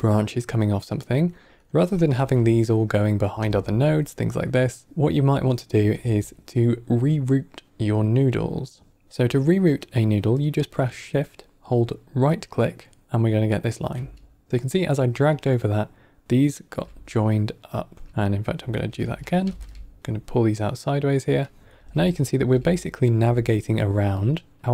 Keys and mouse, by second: 1.9 shift+click, 2.0 shift+d, 3.3 alt+right click, 3.3 click, 3.3 g, 4.8 drag, 4.9 g, 5.3-5.6 drag, 5.8 g, 9.0 shift+right click, 11.5-13.5 shift+right drag, 14.5 g, 16.2 click, 16.6 g, 17.7 click, 17.8 g, 18.1 shift+right click, 18.8 g, 19.3 g, 21.4 drag, 21.7 g, 22.3 g, 23.7 click, 24.1 click, 24.5 click.